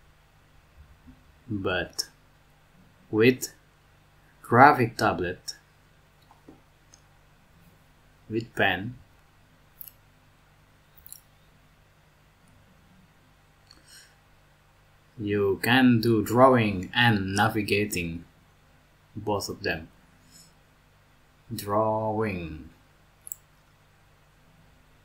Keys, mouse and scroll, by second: 18.4 ctrl+z, 18.7 ctrl+z, 19.1 ctrl+z, 19.4 ctrl+z.